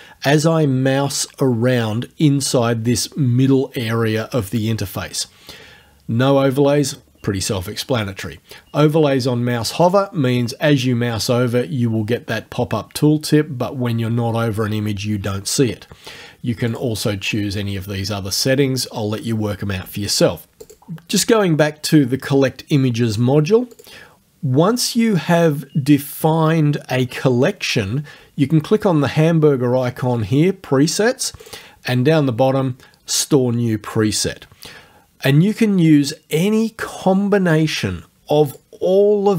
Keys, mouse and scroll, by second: 9.9 click, 16.7 click, 20.7 click, 23.7 click, 31.5 click, 35.5 click, 38.5 click.